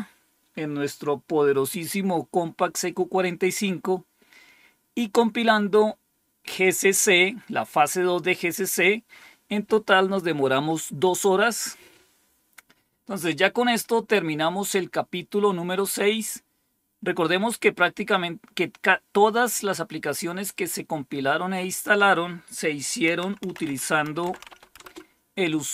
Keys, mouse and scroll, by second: 4.2-4.9 scroll down 2, 21.4 click, 22.8-24.9 typing.